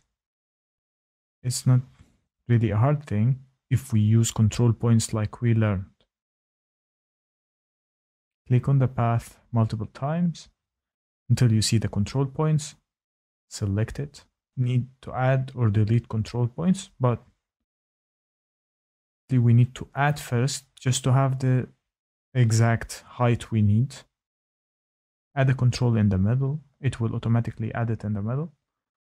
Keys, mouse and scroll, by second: 3.0 click, 3.2 click, 4.7 click, 4.9 click, 6.3 click, 8.0 click, 8.2 click, 9.5 middle click, 9.7 middle click, 11.8 click, 15.1 click, 16.2 click, 17.0 ctrl+z, 18.6 click, 19.9 click, 23.3 shift+middle click, 28.3 shift+right click.